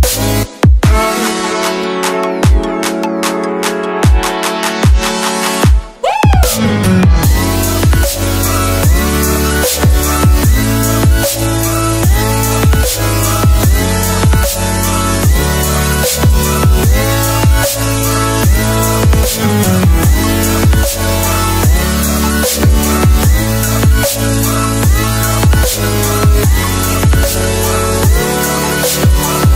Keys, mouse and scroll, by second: 0.5 click, 4.6 scroll down 1, 6.6 click, 10.5 s, 11.8 click, 15.8 ctrl+z, 16.9 ctrl+s, 18.5 click.